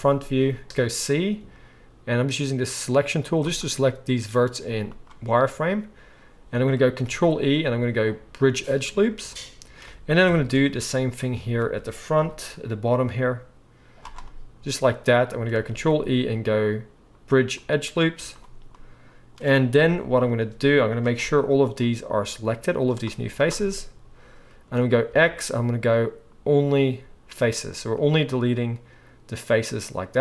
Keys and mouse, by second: 0.6 z, 1.9 c, 4.6 z, 7.1 ctrl+e, 10.3 KP_1, 10.6 z, 11.6 alt+a, 12.2 c, 15.6 ctrl+e, 18.1 z, 19.7 KP_1, 20.1 z, 21.2 c, 23.1 z, 25.0 x.